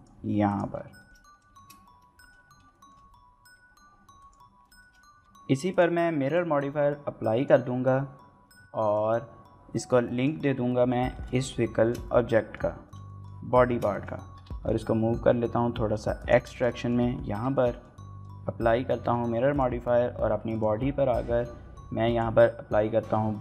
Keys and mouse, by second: 0.0-0.2 typing, 0.5 click, 1.0 shift+middle click, 1.2 shift+middle click, 1.3 shift+middle click, 1.4 shift+middle click, 1.8 shift+middle click, 2.0 g, 2.0 z, 2.1 click, 2.3 g, 3.0-4.2 drag, 4.2 shift+middle click, 4.4 middle click, 4.6 s, 4.6 y, 4.9 click, 5.0 middle click, 5.1 shift+middle click, 5.7 drag, 6.3-7.4 drag, 8.8 click, 11.1 shift+middle click, 11.4 middle click, 11.8 shift+middle click, 12.0-12.5 middle drag, 12.9-13.3 shift+middle drag, 13.7 shift+middle click, 13.9 middle click, 14.4 g, 14.4 x, 16.2 shift+click, 16.5 shift+middle click, 16.7 middle click, 17.5 shift+middle click, 17.7 middle click, 18.6 ctrl+a, 19.0 shift+middle click, 19.2 middle drag, 20.5-22.3 drag.